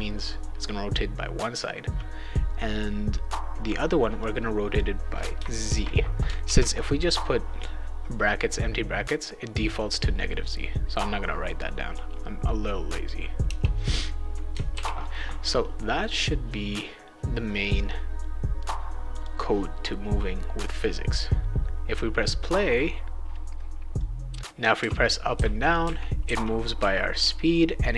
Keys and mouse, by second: 4.2 click, 5.7 shift+z, 6.4 ctrl+s, 11.9-13.0 drag, 13.4 BackSpace, 14.7 ctrl+s, 19.1 click, 20.6 click, 24.0 click, 24.3-27.9 typing.